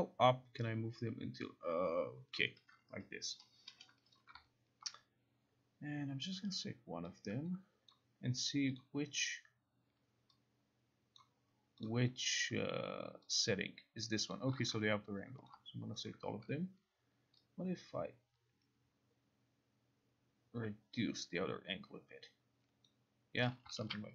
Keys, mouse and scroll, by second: 2.4 click, 4.2 click, 8.0 click, 8.9 click, 11.3 click, 11.9 click, 14.5 click, 15.6 click, 16.2 shift+click, 22.9 click, 23.7 click, 23.9 ctrl+e, 23.9 ctrl+r.